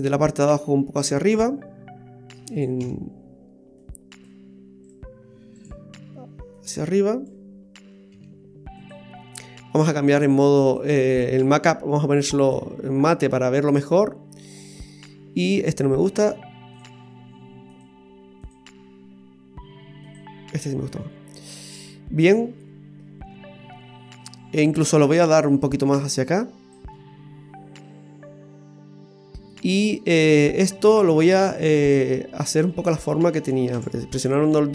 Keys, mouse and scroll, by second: 0.5 click, 0.5 click, 0.6 click, 1.1 click, 1.1 click, 2.8 z, 4.8 right click, 5.6 right click, 6.6 click, 8.1 z, 10.2 click, 13.2-13.7 scroll down 1, 14.4-14.8 scroll up 2, 14.8 middle click, 17.7 click, 20.6-20.9 scroll up 1, 20.9 middle click, 24.7 right click, 25.5 click, 26.9 middle click, 31.6 click, 32.8 middle click, 33.7 KP_1, 34.1 KP_3.